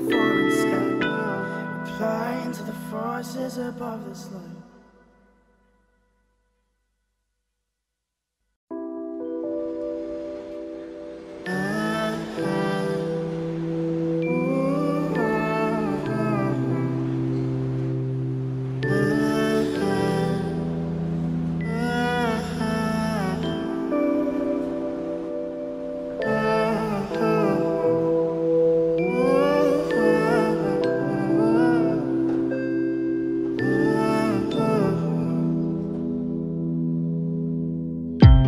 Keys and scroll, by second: 13.5 ctrl+a, 16.1 ctrl+d, 38.3 ctrl+a.